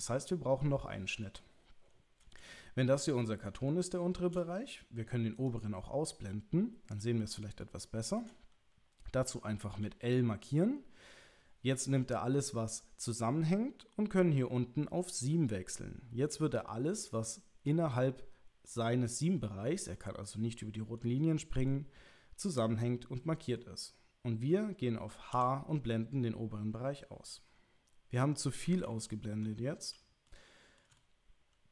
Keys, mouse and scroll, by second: 3.8 shift+middle click, 5.3 click, 7.6 shift+middle click, 15.2 click, 16.7-17.7 middle drag, 18.6 middle click, 19.6 middle click, 20.7 middle click, 21.6-23.6 middle drag, 25.3 h, 28.8 ctrl+z, 30.2 shift+middle click, 31.0-31.7 middle drag.